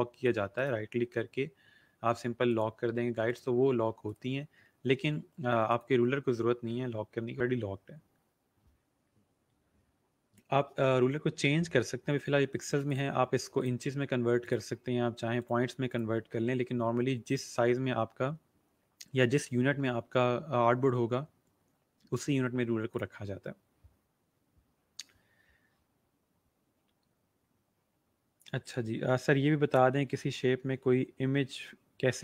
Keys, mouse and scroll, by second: 0.4 right click, 2.3 click, 4.0 right click, 5.6 click, 12.8 right click, 13.6 click, 14.4 right click, 17.7 click, 22.9 click.